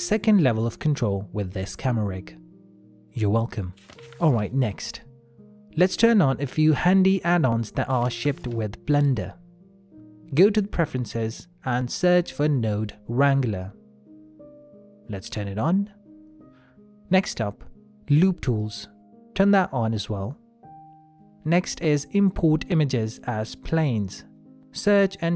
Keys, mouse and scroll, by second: 4.1 click, 8.8 click.